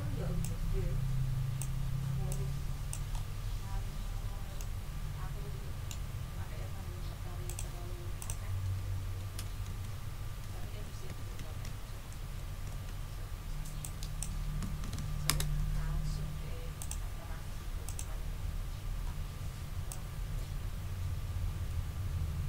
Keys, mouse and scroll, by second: 0.4-1.8 ctrl+drag, 2.3 ctrl+click, 3.1 ctrl+scroll up 2, 4.5 ctrl+middle click, 5.5 ctrl+click, 7.4 click, 8.2 click, 9.2-12.0 typing, 12.7 ctrl+a, 13.8 click, 14.4-15.3 typing, 16.8 click, 17.8 click, 19.0-19.3 scroll up 2, 19.9-22.4 drag.